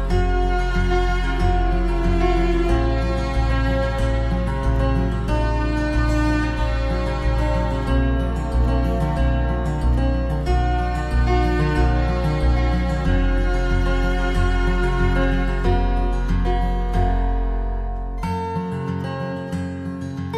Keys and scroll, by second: 1.3 ctrl+c, 1.3 ctrl+v, 7.0 ctrl+c, 7.1 ctrl+v, 11.5 ctrl+-, 12.9 ctrl+c, 14.2 ctrl+v.